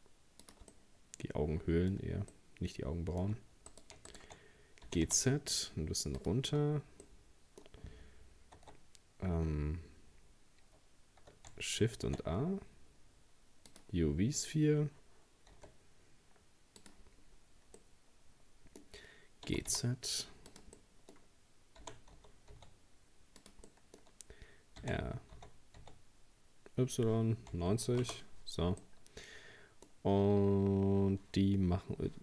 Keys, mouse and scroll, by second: 0.7-3.7 middle drag, 3.7 right click, 4.1 shift+right click, 4.9 g, 6.5-7.1 scroll down 2, 7.1-8.7 middle drag, 8.7 Tab, 11.8 shift+a, 14.1-15.5 scroll down 3, 15.5 s, 17.1-17.8 scroll up 5, 17.8-19.5 middle drag, 19.5 g, 20.8-21.8 middle drag, 21.8 g, 23.7-24.8 middle drag, 24.8 r, 28.8-31.8 middle drag.